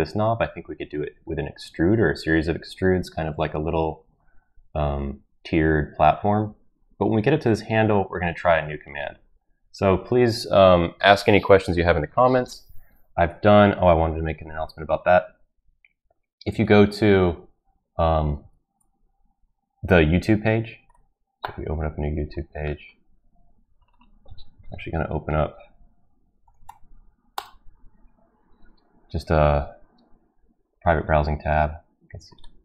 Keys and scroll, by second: 16.5 alt+Tab, 18.4 alt+Tab, 24.8 shift+n.